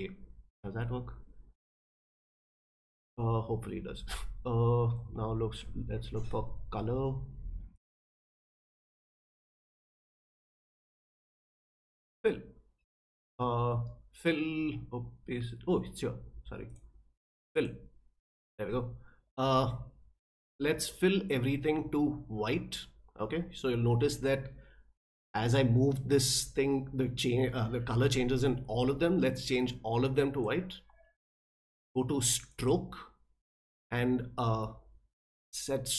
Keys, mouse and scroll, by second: 7.7 click, 8.4 click, 9.2 click, 16.7 click, 17.5 click, 21.3-30.4 drag, 32.5 click.